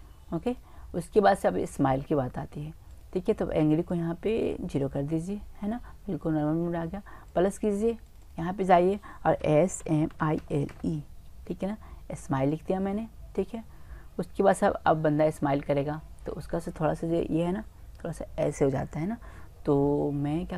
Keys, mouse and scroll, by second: 0.9-2.9 middle drag, 2.9-5.7 drag, 5.8 middle click, 6.8 middle click, 7.3-7.9 drag, 8.0 click, 8.2 click, 9.0 click, 9.2 click, 9.4 click, 10.0 click, 14.9-18.4 middle drag.